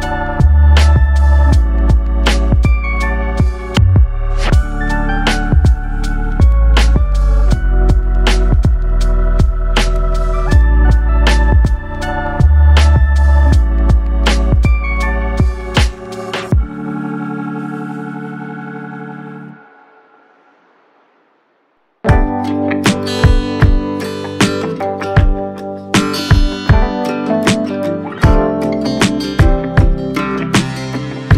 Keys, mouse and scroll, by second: 0.8-1.5 scroll down 3, 1.9 click, 3.5 scroll up 2, 3.9-5.5 scroll down 1, 5.5 click, 8.0 shift+click, 9.7 ctrl+p, 14.3 right click, 16.0 click, 17.0 click, 20.7 shift+right click, 22.3 ctrl+p, 25.7-27.4 drag, 27.4 KP_0, 29.2 click, 31.2 click.